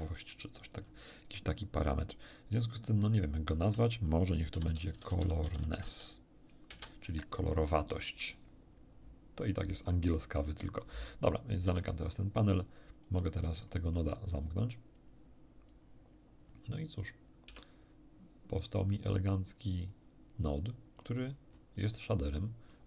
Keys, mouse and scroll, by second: 4.5-5.8 typing, 6.7 Return, 11.6 n, 13.0-13.8 drag, 13.8 scroll down 1, 13.9 middle click, 15.0 click, 17.5 Tab, 18.9 click, 19.9-21.2 drag, 21.8-22.8 middle drag.